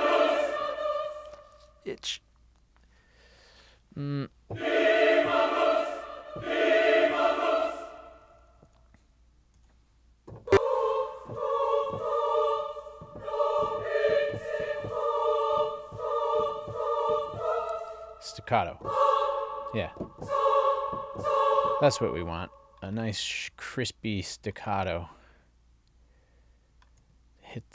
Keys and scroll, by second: 7.7 Up, 9.6 Down, 18.1 Down.